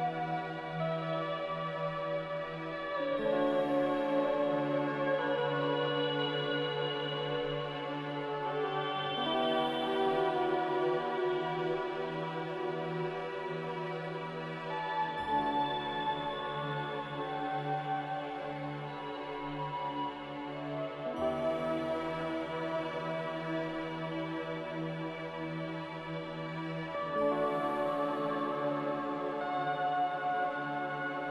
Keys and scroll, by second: 15.4 a.